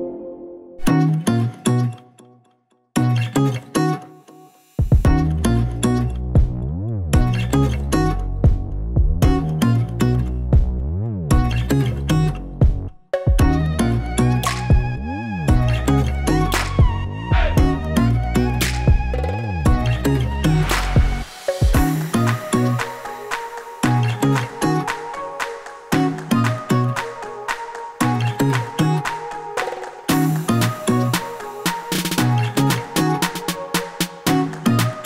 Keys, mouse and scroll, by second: 0.0 click, 0.6 right click, 1.3 a, 1.4 a, 1.7 click, 2.0 right click, 2.6 click, 2.9 right click, 3.5 click, 4.2 s, 5.3 click, 5.6 click, 6.5 s, 7.3 click, 9.1 click, 10.3 scroll up 1, 10.7 click, 11.1 click, 14.9 click, 16.0 s, 17.8 middle click, 18.5 shift+middle click, 18.5 typing, 19.1 click, 20.2 click, 20.7 click, 22.0 click, 23.5 click, 24.1 shift+d, 24.8 click, 25.5 Tab, 26.0-27.4 typing, 28.0 Tab, 28.7 s, 30.7 click, 31.5 middle click, 32.3 click, 33.9 click, 34.3 click, 34.7 click.